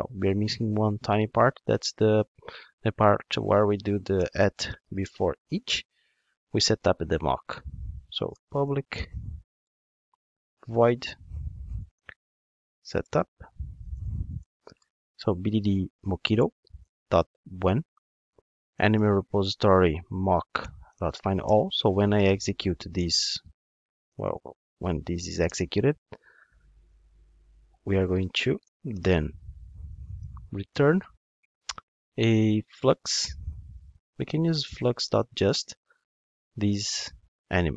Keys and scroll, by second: 6.2 Return, 16.5 Return, 31.2 Return, 35.6 Return.